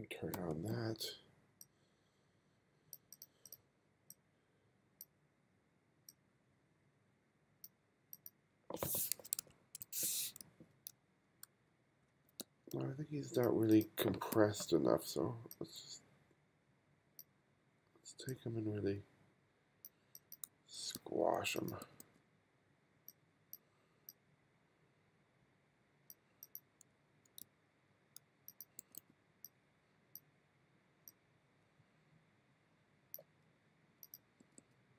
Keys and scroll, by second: 0.4 m, 9.4 1, 10.5 f, 11.0 g, 12.1 f, 12.4 g, 14.0 b, 20.5 f, 21.0 g, 21.9 b, 27.0 f, 27.5 g, 28.8 b, 34.5 b.